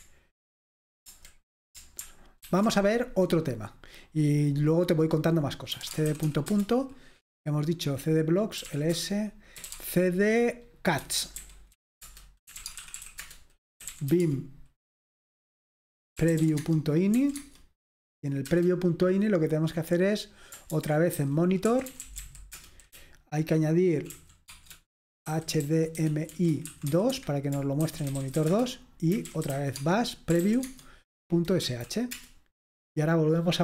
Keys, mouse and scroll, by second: 2.5 alt+super+r, 5.6-6.8 typing, 8.4-14.6 typing, 16.0-17.4 typing, 18.5 typing, 20.9-33.6 typing.